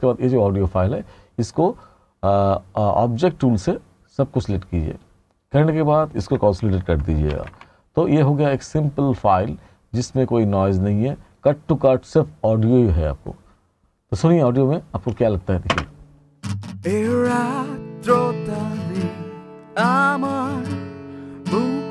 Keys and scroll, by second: 7.4 Page_Down, 15.7 space.